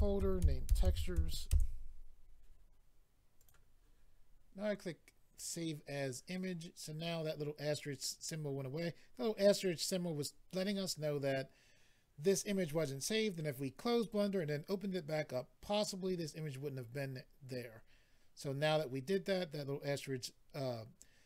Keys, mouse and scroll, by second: 0.0-1.1 typing, 1.5 Return, 3.3 click, 5.3 click, 5.4 click.